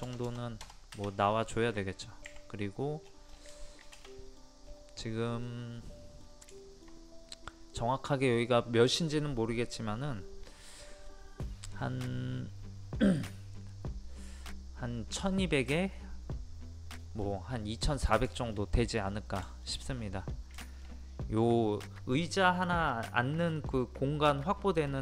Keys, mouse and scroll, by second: 1.5 middle click, 3.0-3.5 scroll down 1, 3.7 shift+middle click, 4.6 scroll up 1, 5.5 middle click, 6.5-15.8 shift+middle drag, 15.8-16.7 scroll down 1, 17.8 scroll up 1, 18.3 shift+middle click, 18.8 scroll up 1, 19.5 shift+middle click, 19.8 scroll down 1, 20.0 scroll up 1, 20.2-20.6 scroll down 1, 20.6 shift+middle click, 20.9 scroll up 1.